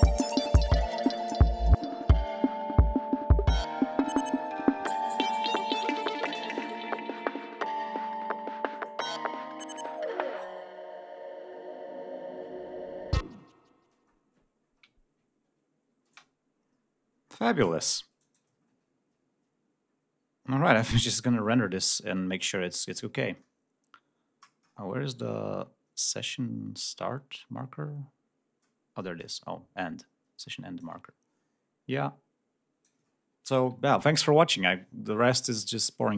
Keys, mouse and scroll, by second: 8.2 ctrl+scroll down 2, 8.6 ctrl+scroll up 2, 10.2 ctrl+scroll up 2, 11.0 scroll down 2, 11.8 scroll down 2, 12.3 scroll up 2, 12.7-13.4 scroll down 2, 13.7 ctrl+scroll up 2, 14.2-15.2 ctrl+scroll down 6, 15.2 ctrl+scroll up 2, 16.4 space, 17.0-17.5 scroll up 2, 17.5-18.0 scroll up 1, 18.5 ctrl+click, 18.9-20.3 ctrl+scroll down 8, 20.9 scroll up 2, 21.2-22.0 scroll down 2, 22.4-22.7 scroll up 2, 22.9 scroll down 2, 29.2-31.0 drag, 31.0 scroll up 2, 31.9 click, 33.1 scroll up 2.